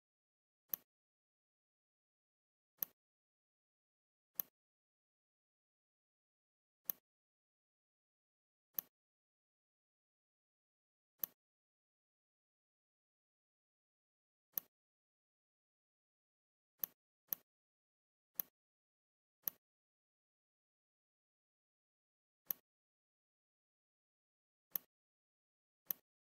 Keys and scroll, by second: 9.7 Delete, 20.8 ctrl+c.